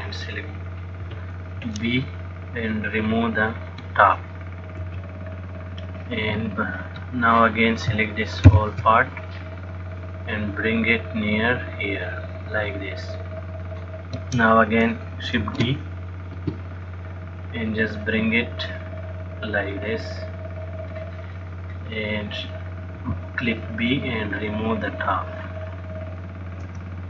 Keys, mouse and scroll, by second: 0.1 click, 1.3 b, 5.0 x, 7.4 click, 8.8 ctrl+l, 10.4 click, 16.1 shift+d, 17.6 click, 21.9 click, 23.3 b, 26.9 x.